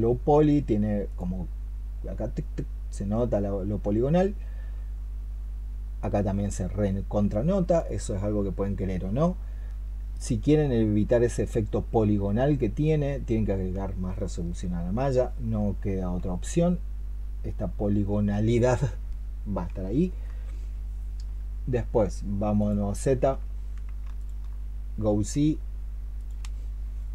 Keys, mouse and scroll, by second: 5.2 middle click, 7.9-9.1 scroll down 4, 9.1 scroll down 1, 9.2-10.0 scroll up 4, 10.0 shift+middle click, 24.0 alt+click.